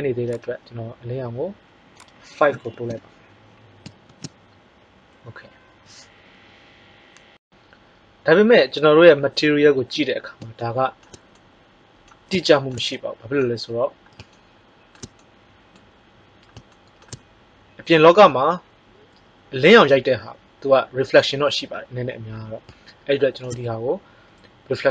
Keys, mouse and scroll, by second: 0.3-3.7 drag, 4.0 shift+z.